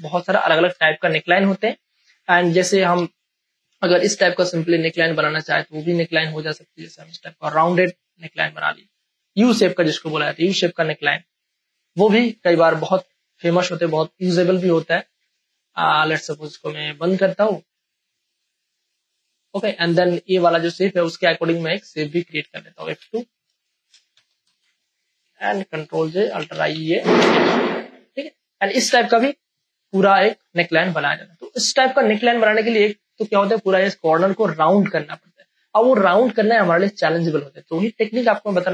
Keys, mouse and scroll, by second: 0.0 F2, 0.5 Return, 1.2 space, 1.4 ctrl+click, 2.9 p, 4.0 click, 6.0 space, 6.2 click, 6.5 space, 7.7-14.2 drag, 19.3 space, 19.5 ctrl+click, 22.9 F2, 23.5 space, 23.7 ctrl+click, 24.1 p, 24.4 Return, 25.8 ctrl+j, 26.2 ctrl+a, 26.5-27.7 typing, 27.9 ctrl+click, 28.9 ctrl+d, 29.2 ctrl+space, 29.4 ctrl+click.